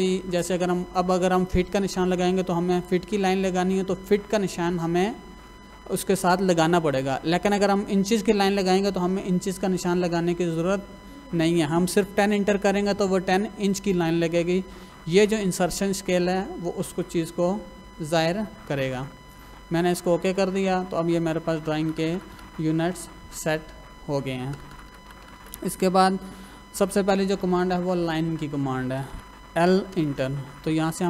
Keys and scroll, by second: 21.8 Escape, 24.5 Escape, 29.0 Escape, 29.6 l, 29.9 space.